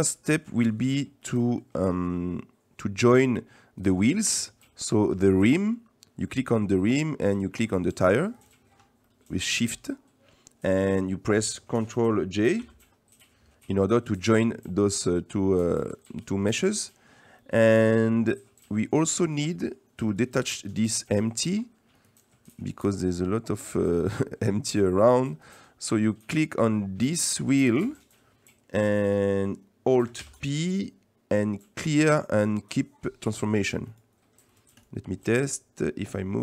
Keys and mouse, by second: 0.2 shift+click, 0.2 shift+middle click, 1.3 middle click, 5.4 click, 6.3 middle click, 7.7 middle click, 8.4 shift+click, 9.0 middle click, 12.6 ctrl+j, 15.2 middle click, 16.0-16.4 middle drag, 16.9 middle click, 17.3 middle click, 18.3 middle click, 19.2 shift+middle drag, 19.5 middle click, 21.3-21.6 middle drag, 21.9 middle click, 24.3 middle click, 30.2 alt+p, 34.5 right click, 34.8 right click, 36.1 right click.